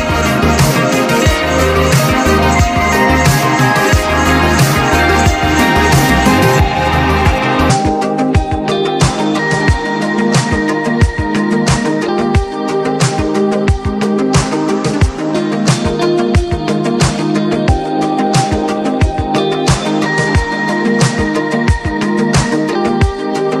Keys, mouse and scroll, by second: 2.6-4.7 drag, 4.7-6.7 drag, 6.7-9.0 drag, 8.4-9.1 typing, 9.1 click, 13.1 click, 13.1 typing, 16.7 click, 18.3-19.7 drag, 19.7-21.4 drag, 22.2 click.